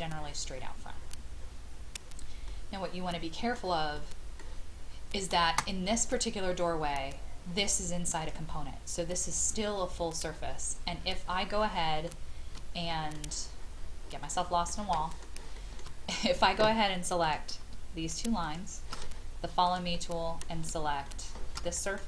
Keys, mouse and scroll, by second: 0.6-1.0 scroll up 1, 2.5-3.7 middle drag, 5.7 space, 6.0 click, 10.9-11.4 scroll down 1, 11.6 shift+middle click, 12.5 middle click, 13.0 scroll down 1, 14.2 middle click, 14.9 shift+middle click, 15.5 shift+middle click, 15.9-17.2 scroll down 1, 17.2 click, 18.4 shift+click, 19.9 middle click, 21.0 shift+middle click.